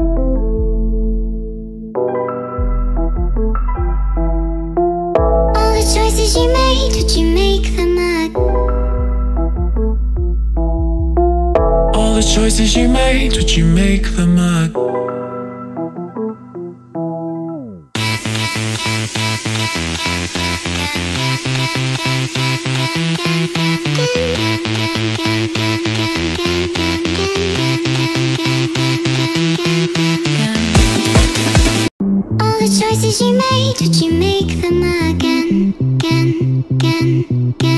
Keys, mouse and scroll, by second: 1.6 click, 3.2 click, 3.8 click, 5.1 click, 5.8 click, 8.2 click, 10.2 click, 15.2 click, 15.3 click, 15.8 click, 16.3 ctrl+click, 16.9 click, 18.6 click, 19.5 ctrl+z, 20.0 shift+click, 21.5 shift+click, 22.0 ctrl+t, 24.5 click, 26.5 shift+click, 26.7 click, 26.9 click, 27.1 shift+click, 27.5 click, 28.7 ctrl+j, 29.5 ctrl+h, 29.8 ctrl+t, 31.8 click, 32.1 click, 32.3 click, 33.4 click, 34.7 click, 35.5 click, 36.3 ctrl+click, 36.4 ctrl+BackSpace, 37.5 click.